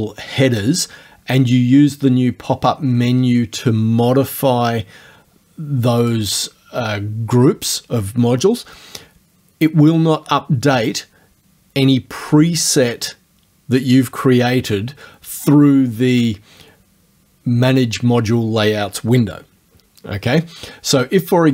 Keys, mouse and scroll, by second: 6.1 click, 16.1 ctrl+click.